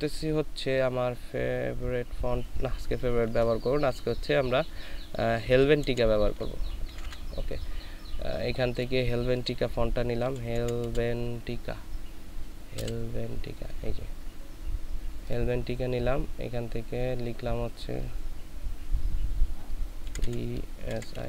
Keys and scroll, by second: 5.6-7.0 typing, 10.2 h, 10.6 h, 12.8 v, 20.1-21.2 typing.